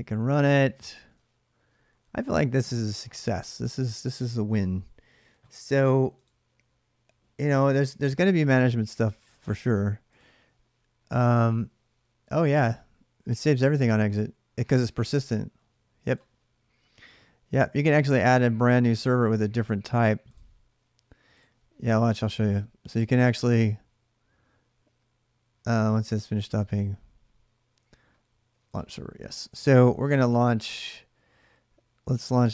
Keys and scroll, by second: 0.0-1.3 typing.